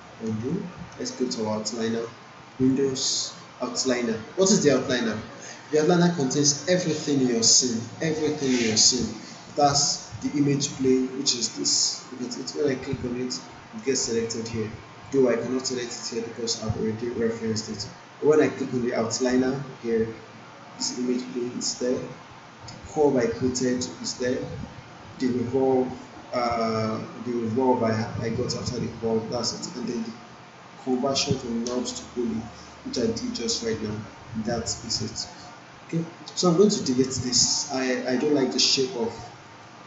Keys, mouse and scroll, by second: 0.2 ctrl+z, 2.5 click, 9.7 click, 12.9 click, 20.7 click, 30.8 click, 36.9 click, 39.1 alt+click, 39.6-39.8 alt+right drag.